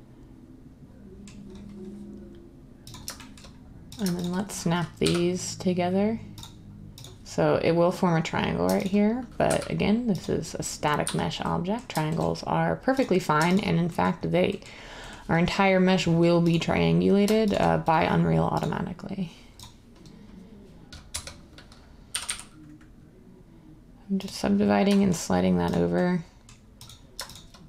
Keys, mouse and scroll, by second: 5.0 m, 9.4 m, 11.0 z, 21.1 1, 22.1 g, 22.2 g.